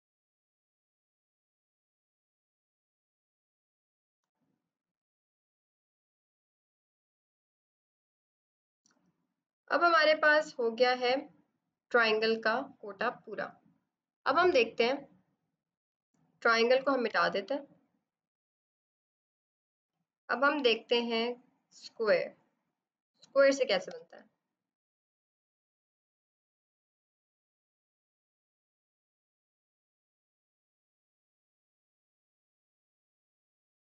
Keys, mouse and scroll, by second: 0.2 click, 0.6 click, 1.0 click, 1.3 click, 1.7-4.1 typing, 1.8 click, 2.5 click, 3.2 click, 3.4 click, 6.8 click, 9.4 ctrl+d, 10.4 b, 13.9 click, 17.0 e, 17.7 click, 23.8 b, 24.6 right click, 24.9 click, 25.2 right click, 25.3 click, 26.4 b, 26.6 right click, 26.7 click, 27.0 click, 27.1 right click, 27.2 click, 27.5 click, 27.7 click, 28.1 click, 28.2 click, 29.9 click, 29.9-30.7 typing, 32.1-33.9 typing, 32.2 click, 32.3 click, 33.4 ctrl+-, 33.4 ctrl+-.